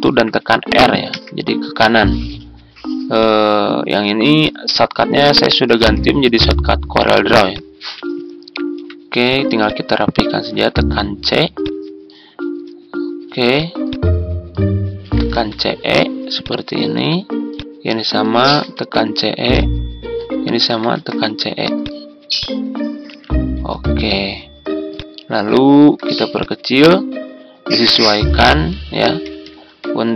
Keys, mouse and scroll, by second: 1.0 shift+r, 10.5 c, 14.7-15.7 typing, 18.1-19.1 typing, 20.6 typing.